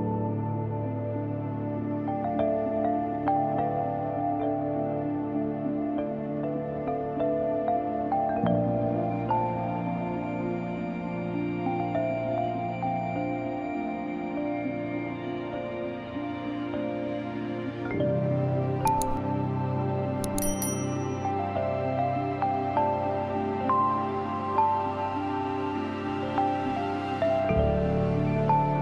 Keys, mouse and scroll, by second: 1.8-3.3 drag, 3.3-3.7 scroll down 1, 3.7-4.9 scroll up 1, 5.5-5.9 scroll down 1, 5.9-6.8 scroll up 1, 6.8 click, 9.0 click, 9.6-10.0 scroll down 1, 10.3-10.7 scroll up 1, 10.7 space, 10.9 click, 11.2 space, 12.4 space, 13.4-14.1 scroll up 1, 14.1 space, 14.3 click, 14.6 space, 14.7 space, 17.2 click, 18.3-18.7 scroll down 1, 18.7 scroll up 1, 19.2-20.0 scroll down 1, 20.0 scroll up 1, 23.3 click.